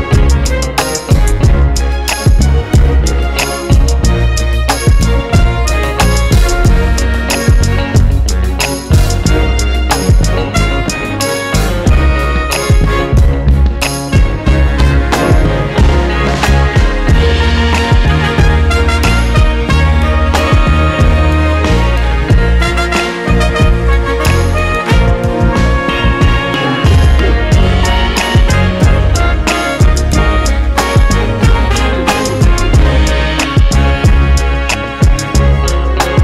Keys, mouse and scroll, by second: 0.2-14.5 drag, 1.3 scroll down 1, 1.5 KP_0, 1.8 scroll up 1, 15.7-19.0 drag, 17.0 scroll down 1, 17.2 alt+a, 18.0 scroll up 1, 18.4 scroll down 1, 19.3 scroll up 1, 19.5-20.0 scroll down 1, 20.5 z, 20.7 scroll down 1, 21.5 click, 21.8 KP_1, 22.0-22.5 scroll down 1, 22.5 g, 24.1 click, 24.8 click, 25.2 KP_0, 25.5 scroll up 1, 26.1 click, 26.7-28.5 scroll down 1, 28.9 click, 30.3 a, 33.1 drag.